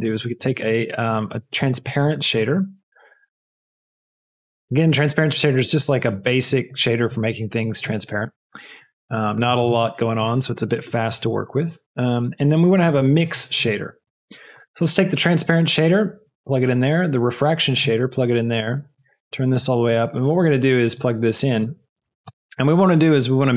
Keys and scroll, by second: 0.5 a, 1.6 t, 1.8 r, 1.9 a, 3.6 Down, 3.8 Return, 9.7 shift+a, 12.6 m, 12.8 i, 13.0 x, 13.7 Return.